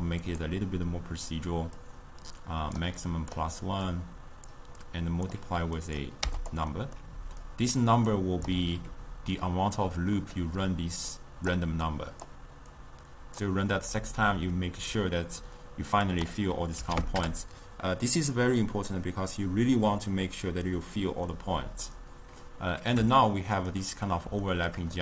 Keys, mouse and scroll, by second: 4.0-5.0 drag, 5.9 click, 6.8-7.5 middle drag, 7.5-10.4 drag, 10.4-11.2 middle drag, 11.2-12.0 drag, 12.8-16.0 drag, 16.1-19.2 drag, 21.4-25.0 middle drag.